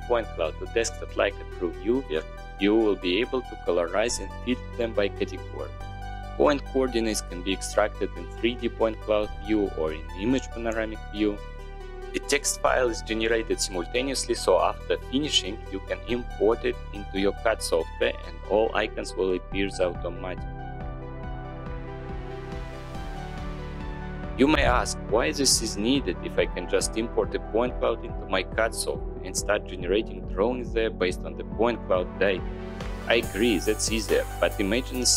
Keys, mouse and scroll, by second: 6.1 click, 8.2-8.9 drag, 10.5 click, 11.7 click.